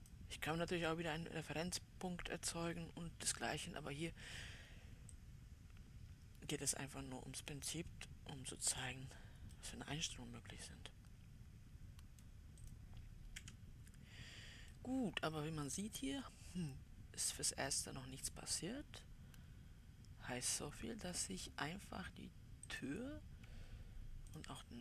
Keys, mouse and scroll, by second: 1.5-2.0 scroll up 2, 2.9-5.6 scroll up 2, 5.6-8.7 drag, 10.0-13.2 middle drag, 13.2 click, 13.8 w, 15.2-18.0 right drag, 15.2 middle click, 18.0 middle click, 23.2-24.8 drag.